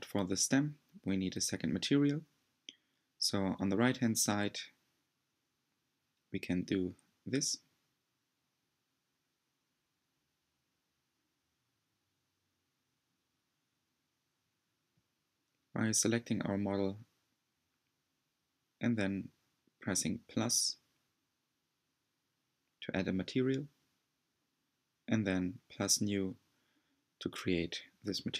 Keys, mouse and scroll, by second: 0.5-2.4 shift+middle drag, 2.4-3.0 scroll up 4, 3.0-4.7 shift+middle drag, 4.7-5.6 scroll up 1, 9.2-9.8 scroll down 2, 9.8-13.4 middle drag, 13.4 scroll up 2, 13.7-24.4 middle drag, 24.4-28.3 drag.